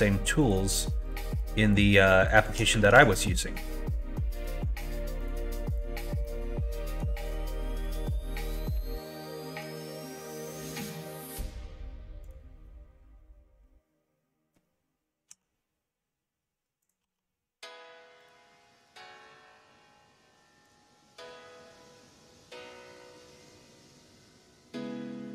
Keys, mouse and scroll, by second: 0.4 click, 1.0 shift+click, 1.7 shift+click, 2.8 ctrl+z, 4.5 ctrl+e, 5.7 click, 6.2 middle click, 7.1 middle click, 7.9 click, 8.7 3, 8.9 click, 9.8 g, 15.3 s, 17.0 e, 21.3 middle click, 21.8 middle click, 22.4 shift+middle click, 22.8 middle click, 23.6 middle click.